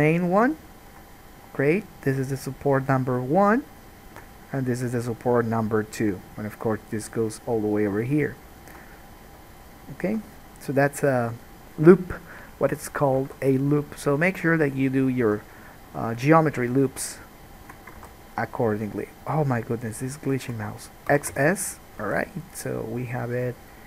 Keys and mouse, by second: 0.6 ctrl+middle click, 0.8-9.5 ctrl+drag, 2.9 right click, 3.8 right click, 5.1 right click, 6.1 right click, 9.7 alt+click, 13.4 alt+a, 15.4 1, 17.7 ctrl+click, 18.2-22.2 alt+drag, 18.4 alt+a, 18.7 middle click, 18.7 right click, 19.2 shift+middle click, 19.2 shift+right click, 19.7 shift+middle click, 19.7 shift+right click, 21.3 x, 22.3 alt+a.